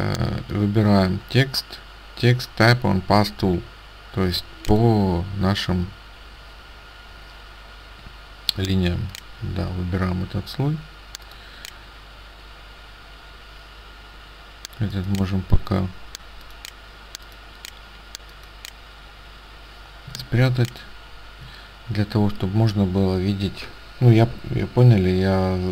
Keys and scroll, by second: 20.2 ctrl+space.